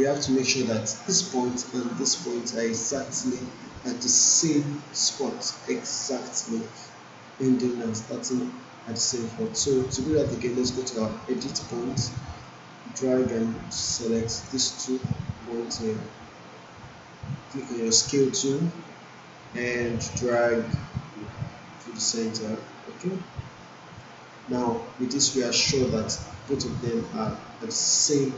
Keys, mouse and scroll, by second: 0.2 alt+right click, 8.0 right click, 12.4-14.2 drag, 17.9-22.4 drag.